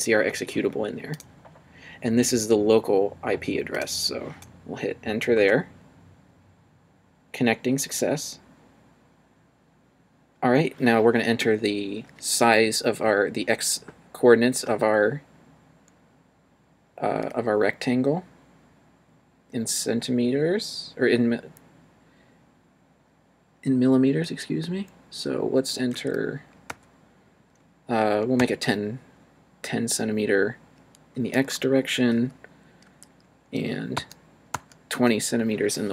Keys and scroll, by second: 5.4 Return, 25.9 1, 26.7 0, 28.4 0, 31.3 Return, 32.9 2, 34.0 0, 34.5 0.